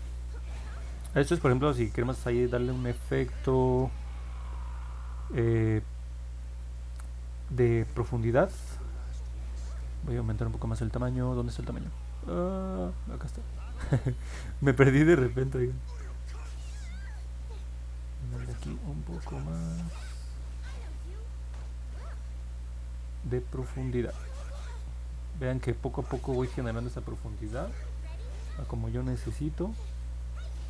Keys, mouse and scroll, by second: 17.0 click, 17.4 click, 18.3 click, 19.2 click, 20.1 click, 21.2 click, 21.6 click, 22.1 click, 22.6 click, 23.1 click, 23.6 click, 23.9 click, 25.9 click, 26.3 click, 26.8 click.